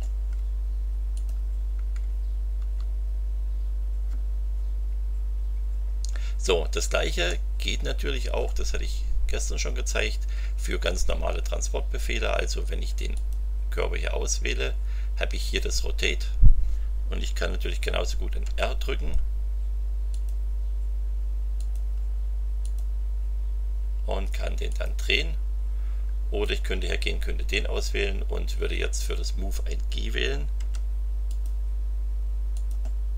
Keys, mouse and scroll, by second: 1.1 click, 2.6 Delete, 7.2-8.6 middle drag, 13.1 click, 18.4 r, 20.1 click, 21.6 click, 22.6 click, 24.7 click, 26.4 click, 30.5 g, 31.2 click, 32.5 click.